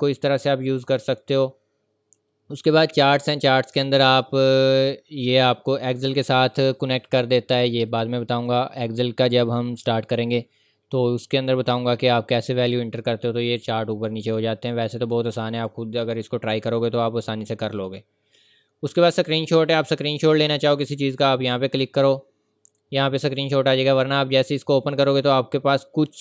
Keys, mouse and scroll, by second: 0.4 click, 4.4-5.5 scroll down 1, 5.5 click, 17.6 click.